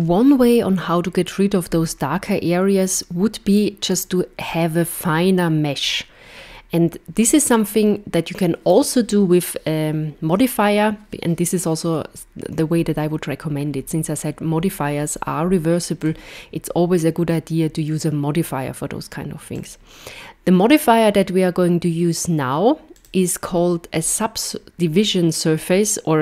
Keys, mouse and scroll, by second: 16.0 click, 19.6 click, 23.0 click.